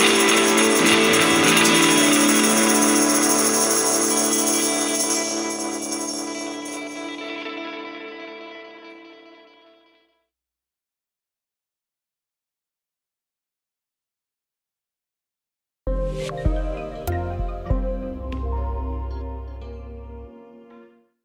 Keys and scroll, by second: 0.4 ctrl+z, 9.0 ctrl+shift+q, 11.2 ctrl+u, 11.7 ctrl+shift+q, 13.8 ctrl+Home.